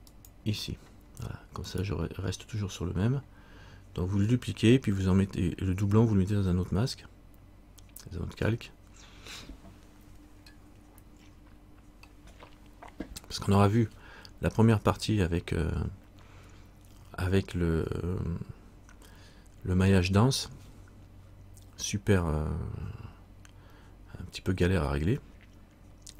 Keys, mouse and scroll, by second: 1.9 right click.